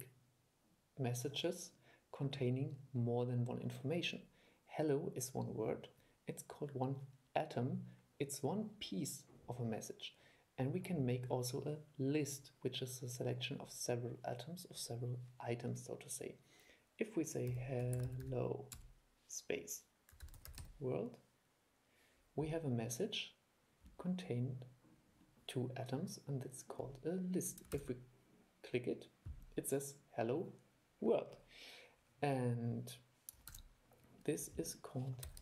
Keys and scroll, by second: 27.9 super+e, 33.7 super+5.